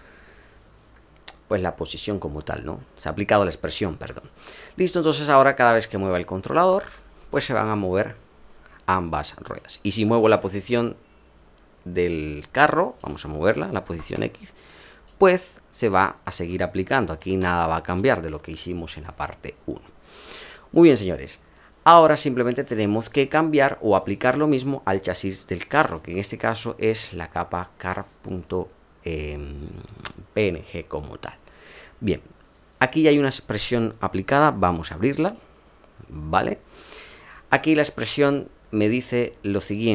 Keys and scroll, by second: 17.2 ctrl+z.